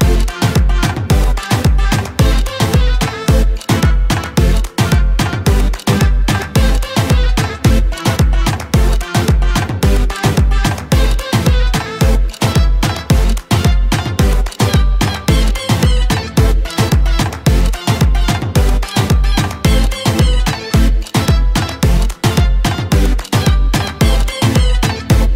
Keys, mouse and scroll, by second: 0.0-4.8 typing, 6.3 Escape, 7.0-10.9 typing, 11.9 r, 13.0-21.8 typing, 22.8-23.4 scroll down 4, 24.7 space.